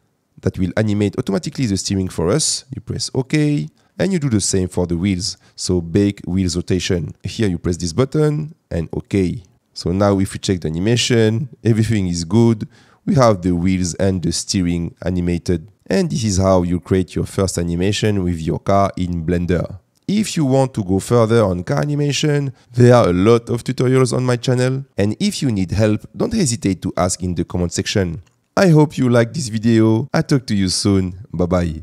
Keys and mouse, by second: 1.7-3.3 drag, 7.2-9.1 drag, 14.0 space, 16.4 space.